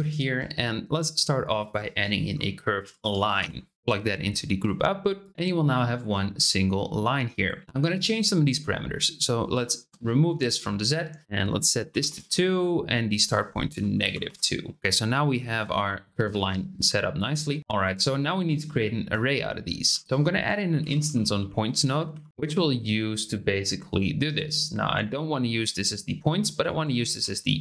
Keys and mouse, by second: 0.2 shift+a, 3.7 click, 5.2 click, 9.1-10.3 drag, 11.2-12.3 drag, 13.1-14.8 drag, 17.1 click, 19.9 shift+a, 22.3 Down, 26.6 ctrl+click, 27.5-27.6 drag.